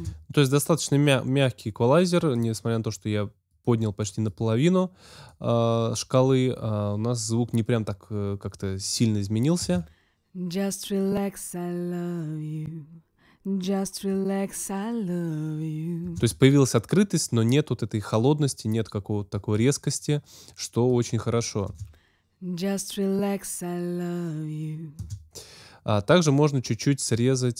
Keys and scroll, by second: 9.5 space, 16.0 space, 21.6 space, 24.9 space.